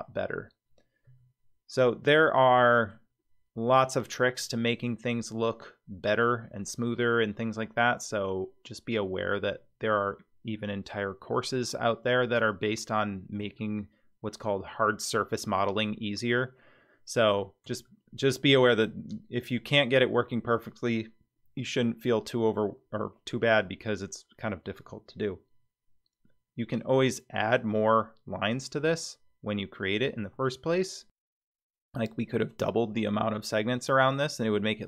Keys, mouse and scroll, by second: 1.0 Tab, 1.7-2.4 scroll down 3, 2.4-2.9 middle drag, 12.7-13.4 scroll down 2, 13.6-14.4 shift+middle drag, 17.1 scroll up 2, 17.8-18.3 shift+middle drag, 18.6-19.6 scroll up 3, 30.3 Tab.